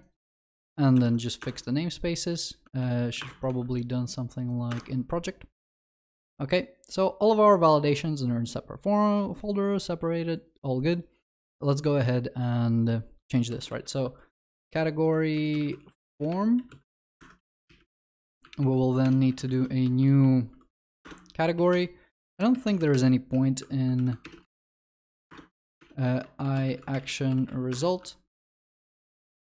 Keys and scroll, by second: 1.0 alt+Return, 3.2 alt+Return, 6.1 ctrl+s, 14.8 Return, 17.2 Escape, 21.0 ctrl+BackSpace, 24.7 ctrl+BackSpace, 25.3 Return, 25.8 ctrl+BackSpace, 28.3 ctrl+w.